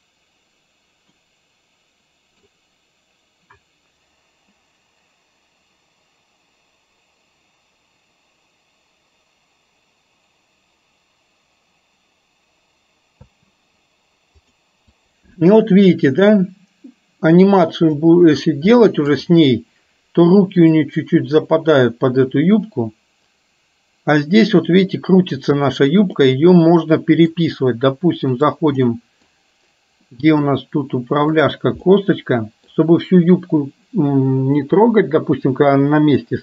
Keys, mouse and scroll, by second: 1.3-2.7 middle drag, 13.3 space, 14.6 click, 15.1-18.2 drag, 18.8-19.2 middle drag, 21.0-26.0 drag, 26.3-27.5 middle drag, 29.0 middle click, 30.1 middle click, 31.5 click, 32.0-32.8 middle drag.